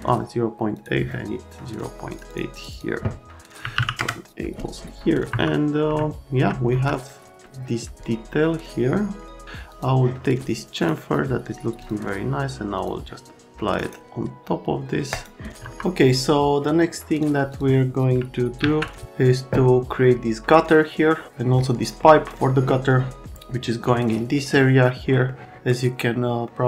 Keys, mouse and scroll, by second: 0.7 right click, 2.1 right click, 2.3 right click, 2.5 right click, 2.7 right click, 3.6 KP_Decimal, 3.7 KP_8, 4.0 KP_Enter, 5.3 F3, 6.0-6.5 alt+scroll down 1, 9.7 click, 10.7 right click, 11.8 click, 12.8 click, 13.7 right click, 15.1 click, 15.6 middle click, 15.6 F3, 17.1 click, 17.5 click, 18.6 alt+q, 21.1 middle click, 22.9 middle click, 22.9 right click, 24.4 right click, 25.3 right click, 26.4 right click.